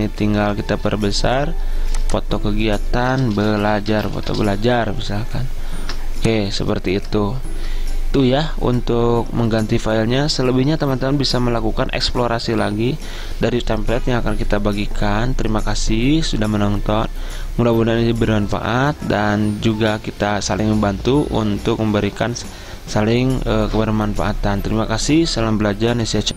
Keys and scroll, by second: 3.2-6.0 typing.